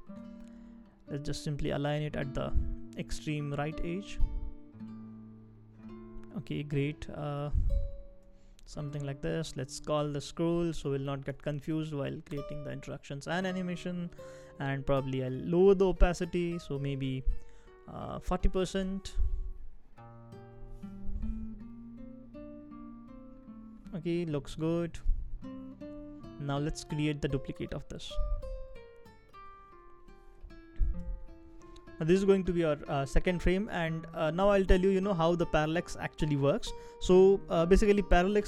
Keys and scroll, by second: 5.9 shift+Up, 6.4 shift+Up, 6.5 shift+Up, 7.5 shift+Right, 7.8 shift+Right, 10.2-12.0 typing, 12.3 Return, 18.1-18.9 typing, 24.2-25.0 typing.